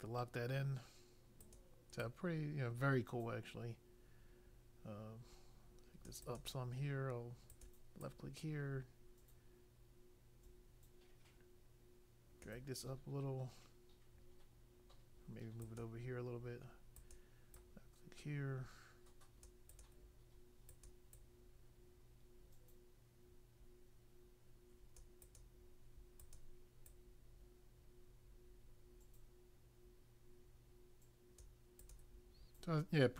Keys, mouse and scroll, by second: 1.4 click, 1.9 click, 6.2 click, 7.4 click, 7.9 click, 15.6 click, 16.9 click, 17.5 click, 19.7 click, 20.7 click, 25.2 click, 26.1 click, 26.9 click, 31.8 click.